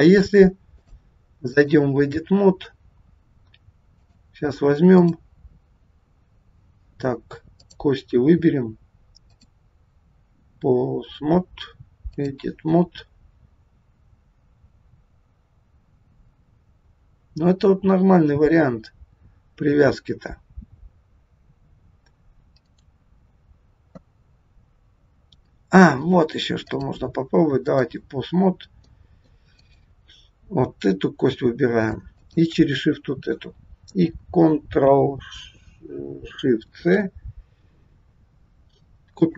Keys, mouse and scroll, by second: 0.8 click, 2.4 scroll up 3, 3.9 click, 4.9 click, 7.6 click, 9.3 click, 17.6-18.3 scroll down 1, 22.6 right click, 26.6 click, 28.4-28.9 scroll down 2, 28.9 middle click, 29.5 click, 31.2 scroll up 2, 32.1 shift+click, 36.6 ctrl+shift+c.